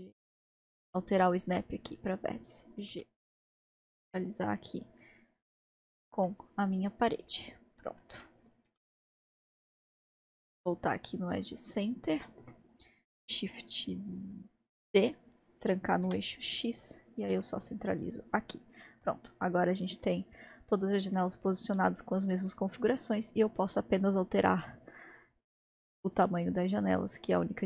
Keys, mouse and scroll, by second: 1.2-2.9 drag, 2.9 g, 6.3-10.2 middle drag, 10.2-11.8 drag, 11.7-14.8 scroll down 2, 14.8 shift+d, 18.3-21.3 scroll down 2, 27.6 click.